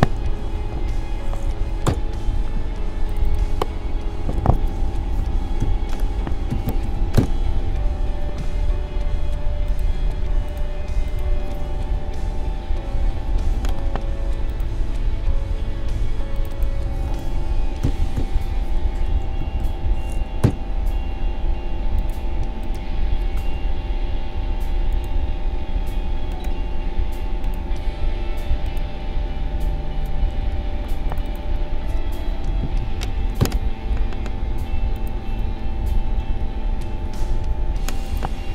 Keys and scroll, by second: 0.0-1.5 typing, 1.8 Return, 4.5-7.4 typing, 12.9 ctrl+g, 17.8-19.9 typing, 20.4 Return, 30.3 ctrl+g, 32.2-33.6 typing, 36.2 ctrl+g.